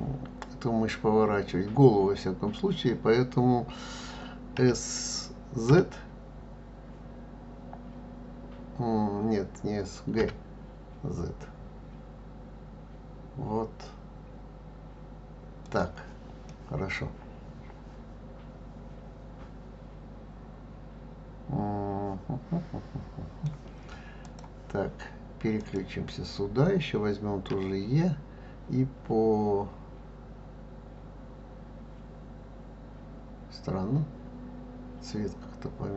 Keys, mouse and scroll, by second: 4.6 s, 16.4-19.5 middle drag, 24.2 click, 25.6 click, 27.5 e.